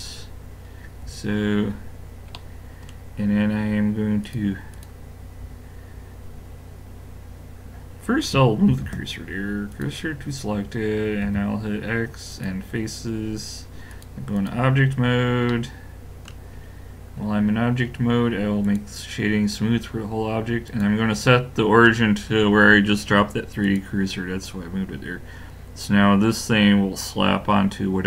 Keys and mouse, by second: 0.1-1.7 middle drag, 2.2 middle click, 4.2 click, 8.7 shift+s, 11.3 x, 13.9 click, 15.5 middle click, 18.6 click, 20.7 click, 24.4 middle click.